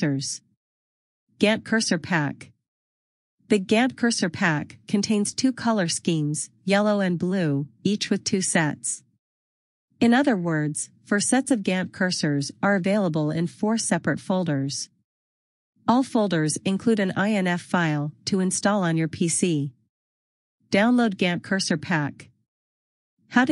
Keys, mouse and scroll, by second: 9.9 click, 12.6 click, 20.7 click.